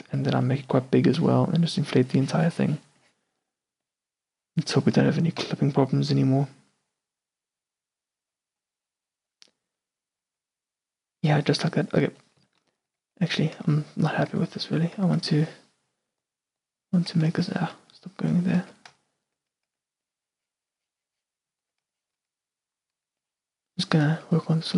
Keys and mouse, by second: 0.2 f, 3.6-5.5 middle drag, 5.5 n, 8.3 n, 13.0 Tab, 14.6 Tab, 15.1 Tab, 17.2 f, 18.7 f, 19.2 middle click, 19.8 f, 21.7 shift+c, 23.1 s.